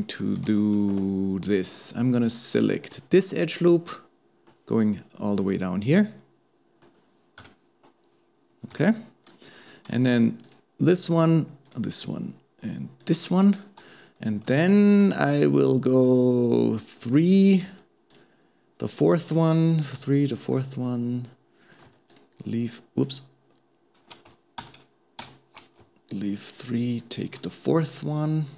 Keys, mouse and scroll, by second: 0.0 shift+middle click, 0.5 alt+a, 2.5 alt+shift+click, 3.2-7.4 middle drag, 7.4 KP_2, 10.4 alt+shift+click, 11.7 alt+shift+click, 13.0 alt+shift+click, 14.2-14.6 scroll up 1, 14.6-17.6 shift+middle drag, 18.1 alt+shift+click, 20.3 alt+shift+click, 22.1 alt+shift+click, 23.0 alt+shift+click, 24.6 ctrl+z, 25.2 ctrl+z, 27.0 alt+shift+click, 27.9-28.5 middle drag.